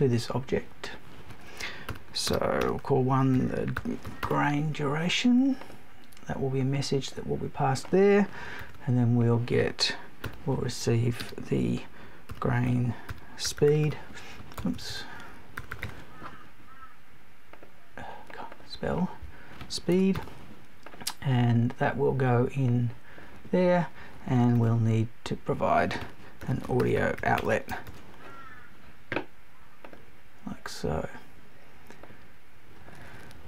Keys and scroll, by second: 14.6 BackSpace, 19.9 BackSpace.